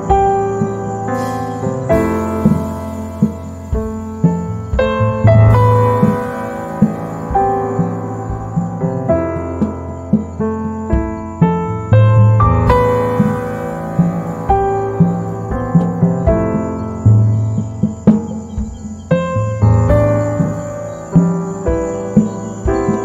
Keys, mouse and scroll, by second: 0.3 click, 0.8 z, 1.1 right click, 1.4 space, 2.0 click, 6.5 ctrl+a, 7.5 click, 8.8 z, 8.9 right click, 9.4 space, 12.0 ctrl+z, 13.4-17.1 drag, 18.5 z, 19.0 space, 20.6 click, 22.6 space.